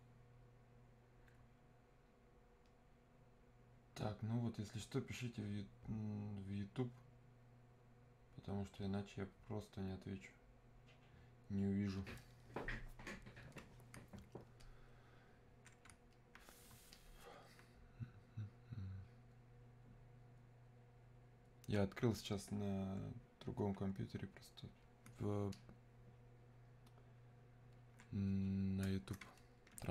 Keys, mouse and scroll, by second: 14.6-25.5 alt+drag, 25.9-29.9 alt+drag.